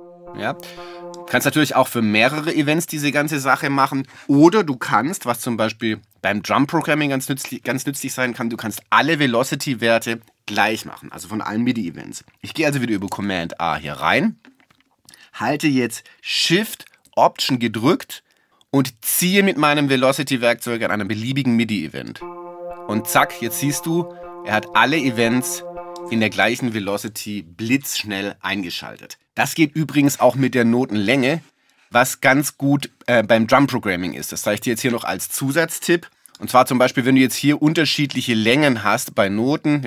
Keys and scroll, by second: 13.1 super+a.